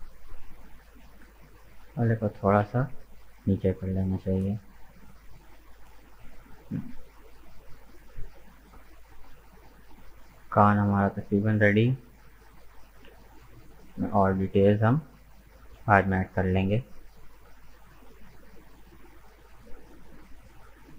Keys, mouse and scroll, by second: 0.0 middle click, 0.9 right click, 1.4 shift+right click, 1.7 middle click, 2.6 g, 5.0-7.4 middle drag, 7.4-8.1 scroll down 3, 8.2 Tab, 8.3 right click, 8.8-10.3 middle drag, 10.3-12.1 scroll up 1, 12.1-12.8 scroll down 4, 12.8-15.0 middle drag, 15.0-16.7 scroll down 4, 16.7 KP_1, 17.9-18.3 scroll up 6, 19.2 right click, 19.6 Tab, 20.3-20.9 middle drag.